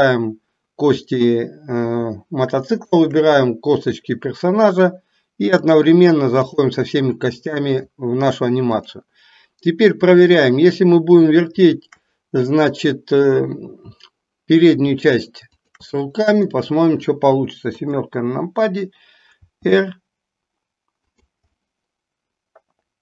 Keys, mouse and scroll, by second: 2.6 shift+click, 5.6-6.8 drag, 15.6 shift+click, 16.5-17.2 middle drag, 17.8 KP_7, 19.4 r, 21.6-23.0 middle drag.